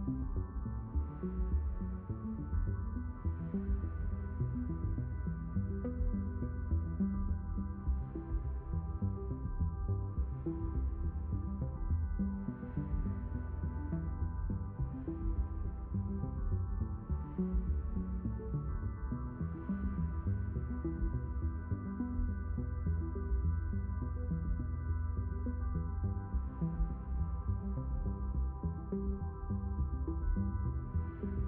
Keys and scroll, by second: 1.7 5, 2.2 Return, 5.9 0, 7.2 BackSpace, 8.0 2, 8.3 Return, 15.6 6, 15.8 Return.